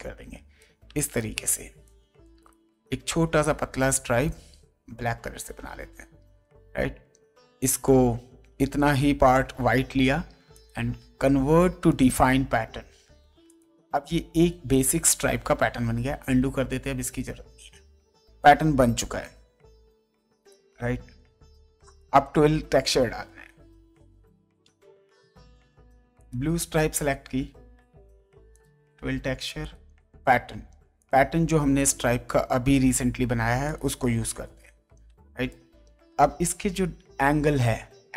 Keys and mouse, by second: 0.8 space, 1.2 click, 2.4 click, 2.8 shift+click, 4.8 d, 5.4 alt+BackSpace, 6.2 ctrl+d, 7.8 click, 10.5 click, 11.9 click, 13.4 click, 21.7 space, 22.0 click, 26.2 ctrl+click, 28.5 click, 29.6 click, 31.0 click, 33.6 click, 35.0 space, 35.5 ctrl+click.